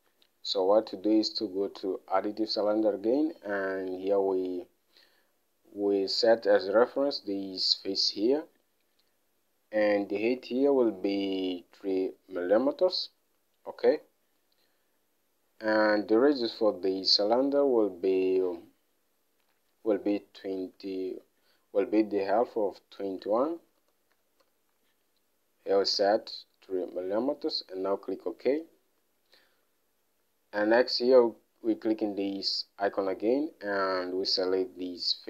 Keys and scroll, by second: 0.4 alt+Tab, 10.8 alt+Tab, 21.1 alt+Tab, 23.7-25.3 typing, 26.9 3, 31.3 3.